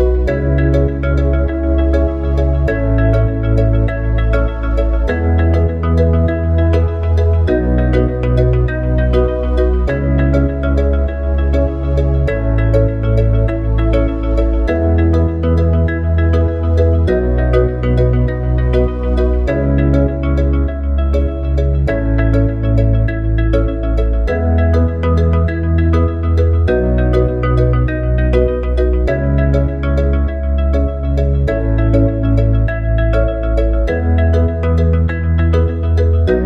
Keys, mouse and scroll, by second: 1.8 s, 5.4 click, 7.3 click, 13.7 click, 15.9 click, 19.6 click, 24.5 Tab, 26.0 click, 27.9 s, 35.8 click.